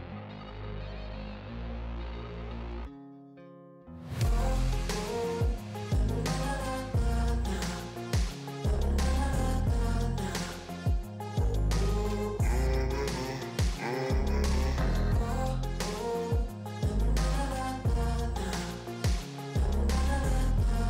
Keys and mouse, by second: 13.2 right click.